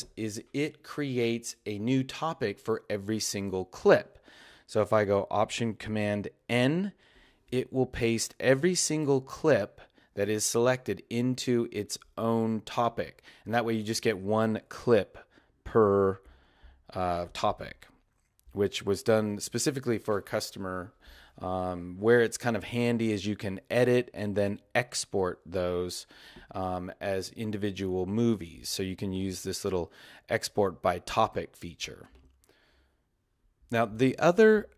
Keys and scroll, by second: 6.5 alt+super+n.